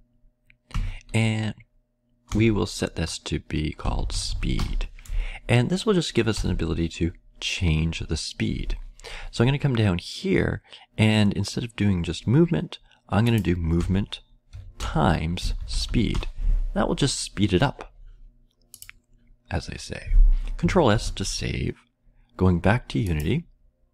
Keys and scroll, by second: 0.6 Tab, 2.0-2.8 typing, 7.3 typing, 14.5-16.6 typing, 20.9 ctrl+s.